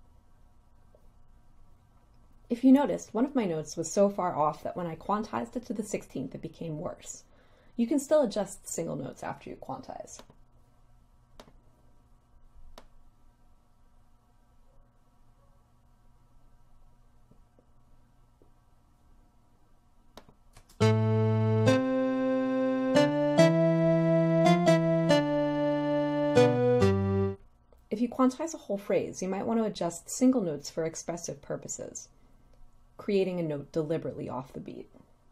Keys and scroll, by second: 20.7 space.